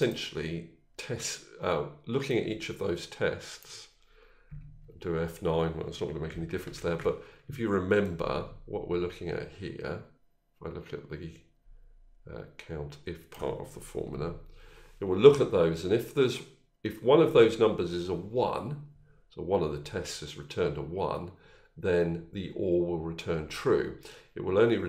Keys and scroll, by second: 4.5 F9, 6.6 ctrl+z, 13.9 F9.